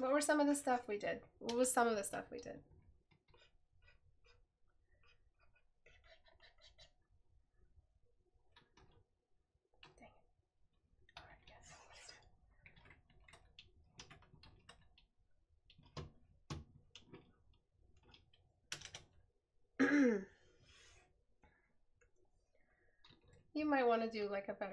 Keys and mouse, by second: 21.3 right click, 23.4 right click.